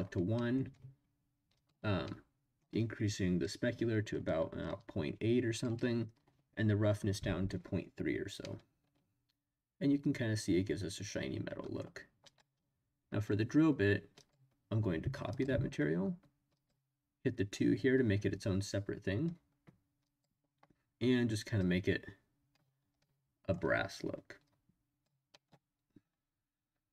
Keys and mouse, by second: 0.3 middle click, 1.6 click, 2.0 middle click, 4.7 click, 8.4-11.8 middle drag, 12.3 click, 14.3-15.4 drag, 16.6 click, 20.1 click, 23.0-24.4 middle drag, 24.4 click, 24.5 middle click, 25.3 middle click.